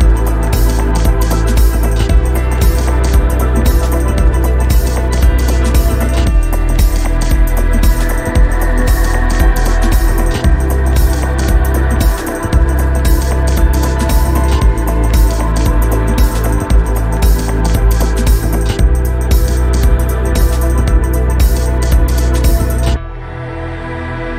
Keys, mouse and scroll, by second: 0.1 click, 0.5 shift+middle click, 1.9 shift+middle click, 2.2 shift+a, 4.1 click, 4.7 shift+a, 5.3 shift+middle click, 5.9 click, 6.3 click, 9.2 scroll up 1, 10.2 shift+middle click, 10.9 click, 11.9 shift+middle click, 12.2 click, 12.8 click, 13.3 ctrl+shift+click, 13.4 ctrl+shift+click, 13.7 click, 14.1 click, 14.8 shift+middle click, 15.4 click, 17.2 scroll up 2, 17.5 scroll down 1, 17.8 scroll up 2, 19.1-19.6 scroll down 3, 19.6 alt+middle click, 20.5 scroll up 4, 20.8 middle click, 21.5 click, 23.1 click, 23.7 scroll down 4, 23.8 shift+middle click, 24.1 click.